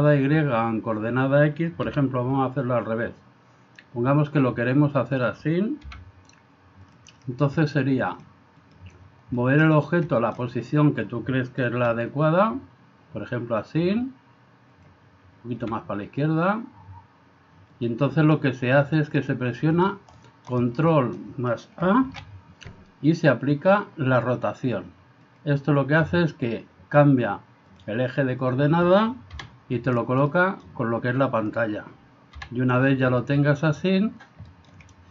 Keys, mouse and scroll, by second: 1.9 r, 5.9 g, 8.1 click, 8.7 click, 9.4 shift+middle drag, 10.2 shift+middle click, 11.8 r, 15.6 g, 20.2-20.5 middle drag, 21.0 middle drag, 22.1 ctrl+a, 28.5 click, 30.3-30.7 middle drag, 34.6 middle click.